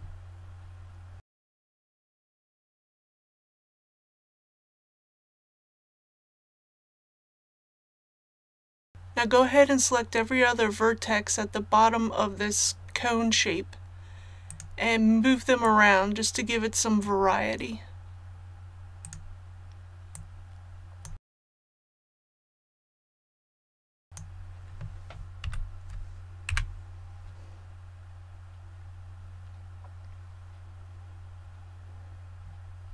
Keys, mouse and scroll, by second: 1.2 click, 1.3 scroll up 1, 2.7 Tab, 4.1 click, 5.6-6.2 scroll up 1, 6.2 middle click, 7.8-8.2 scroll up 1, 14.5 right click, 15.6 click, 19.0 right click, 20.1 click, 21.2 middle click, 21.5 click, 21.8 middle click, 21.9 right click, 22.0 click, 22.1 middle click, 22.3 right click, 22.4 click, 22.5 middle click, 22.7 right click, 22.8 click, 22.9 middle click, 23.2 right click, 23.4 click, 23.6 middle click, 23.8 right click, 24.0 click, 25.4 a, 26.5 KP_1, 27.9-28.2 scroll down 1.